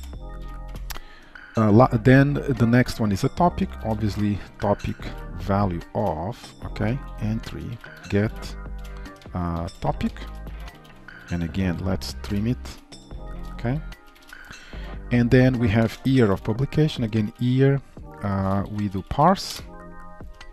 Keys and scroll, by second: 4.7 Return, 17.2 Return.